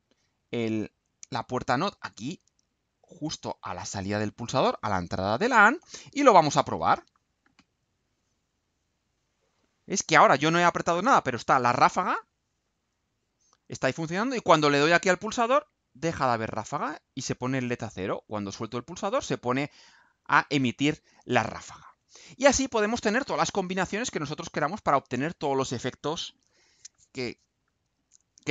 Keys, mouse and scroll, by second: 1.5 click, 2.6-3.9 drag, 4.7-5.7 drag, 6.5 ctrl+u.